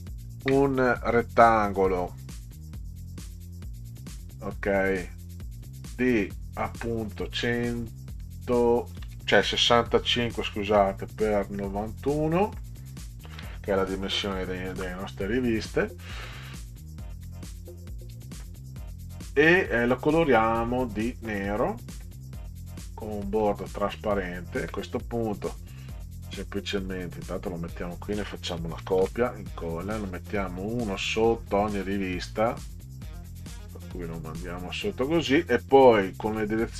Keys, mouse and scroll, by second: 0.7-1.0 drag, 2.5 click, 5.7-6.9 drag, 8.2 click, 10.2-11.2 typing, 11.6 click, 13.3 1, 14.7 Return, 19.7 click, 22.1 click, 23.4 click, 24.2 click, 25.7 ctrl+Up, 26.9 click, 28.8 ctrl+c, 29.0 ctrl+v, 29.6-31.5 drag, 33.5 click, 34.1 click, 36.3 Right.